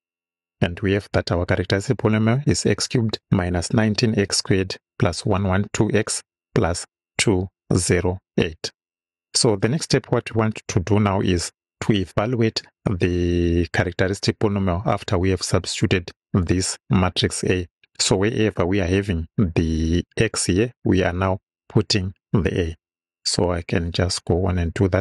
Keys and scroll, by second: 24.4 Return.